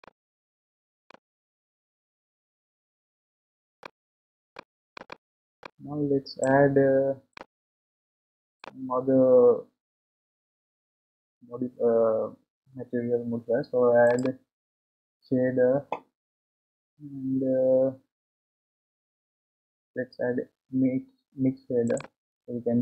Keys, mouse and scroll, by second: 3.8-5.0 shift+drag, 7.3 click, 22.0 click.